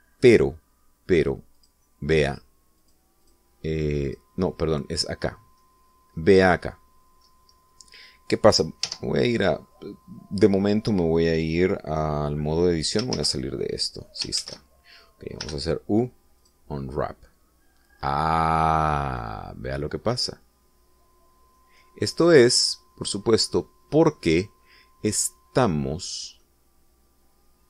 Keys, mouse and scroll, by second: 2.6 click, 3.4 click, 3.9 click, 4.3 click, 5.1 click, 6.3-6.8 middle drag, 6.9 scroll up 2, 7.3-8.4 middle drag, 8.6 scroll down 2, 9.0 middle click, 14.2 shift+z, 15.4 shift+z, 16.5 u, 17.5 click, 19.8 scroll down 2, 20.3-24.7 middle drag, 27.5-27.6 middle drag.